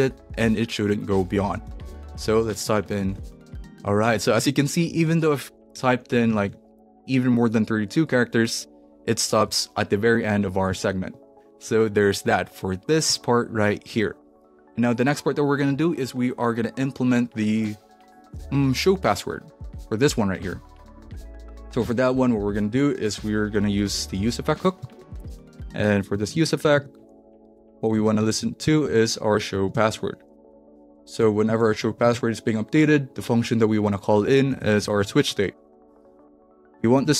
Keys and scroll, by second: 1.1-7.0 typing, 11.1 BackSpace, 23.0 Return, 23.6-24.6 typing, 24.7 Down, 25.1 Return, 26.1 shift+9, 26.7 Right, 27.3 =, 27.6 shift+., 27.9 shift+[, 28.1 Return, 28.6 Down, 28.8 Left, 29.5-32.3 typing, 30.5 Left, 33.8 Tab, 34.2-35.5 typing, 36.0 Down, 36.4 Return.